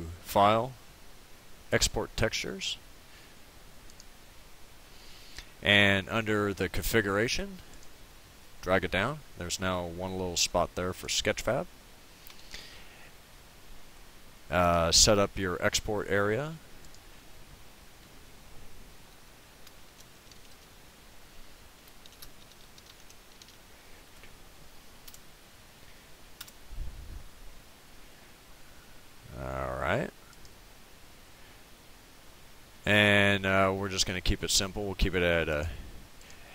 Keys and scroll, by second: 19.6-24.1 typing, 25.1 Return.